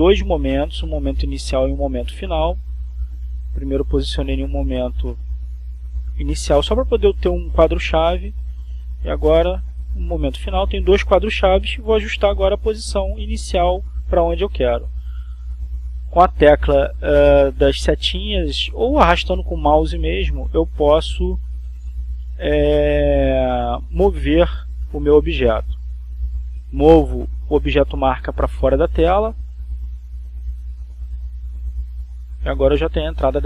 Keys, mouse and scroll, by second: 3.5 click, 4.7 Left, 5.3 Right, 7.6-10.0 drag, 10.9 click, 12.0 Left, 12.5 Right, 13.9-15.0 drag, 16.1 click, 16.9 Left.